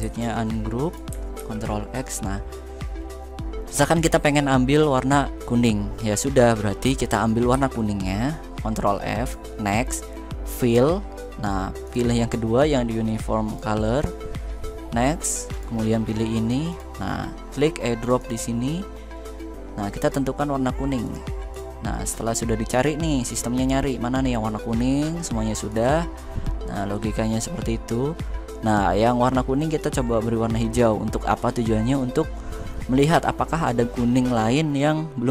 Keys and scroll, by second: 1.1 ctrl+x, 7.2 ctrl+f.